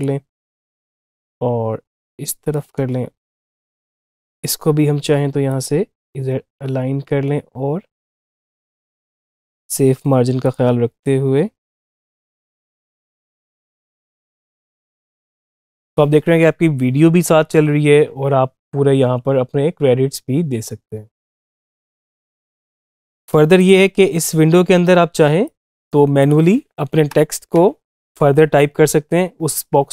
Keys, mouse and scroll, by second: 13.7 click, 15.3 space, 22.5 space, 22.8 click, 26.9 Return.